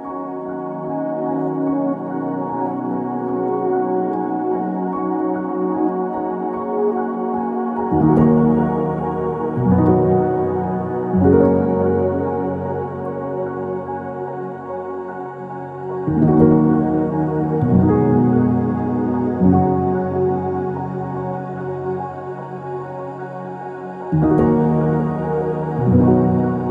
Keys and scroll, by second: 1.1 BackSpace, 1.3 BackSpace, 1.5 BackSpace, 2.3 BackSpace, 6.0-7.0 typing, 9.2-10.0 typing, 20.6-22.8 typing, 26.0 typing, 26.1 Return.